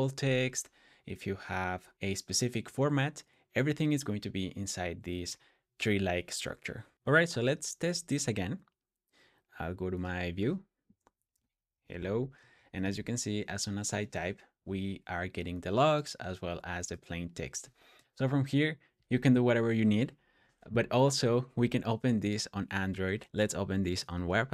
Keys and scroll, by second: 6.9 typing, 10.9-13.4 typing, 22.6 typing, 24.0 typing.